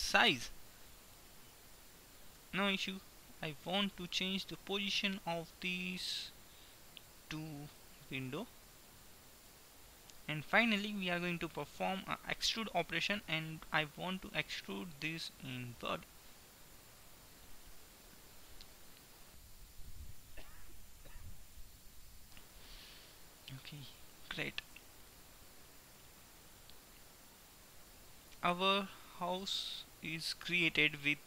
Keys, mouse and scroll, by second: 2.5 KP_3, 5.2-6.7 drag, 8.3-9.3 drag, 12.7 e, 16.3-18.8 middle drag, 22.8-24.7 middle drag, 24.7 Tab, 27.2 middle click.